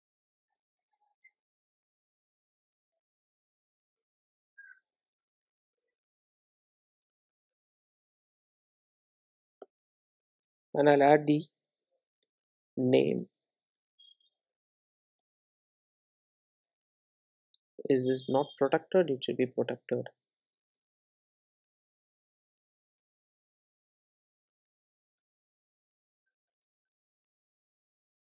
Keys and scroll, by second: 2.8 Return, 7.1 Return, 18.2 super+b, 21.2 Return, 26.4 Return, 26.6 super+e.